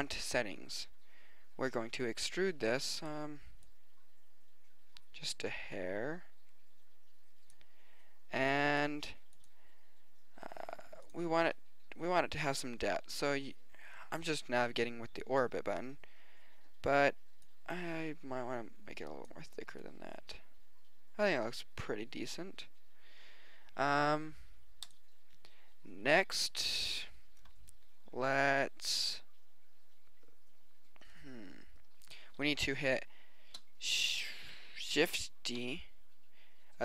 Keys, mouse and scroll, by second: 5.2 middle click, 13.7 middle click, 14.5 click, 14.7 middle click, 14.9-16.1 middle drag, 17.5-18.5 middle drag, 20.3 middle click, 20.6-21.9 middle drag, 33.5 middle click, 35.6 shift+d.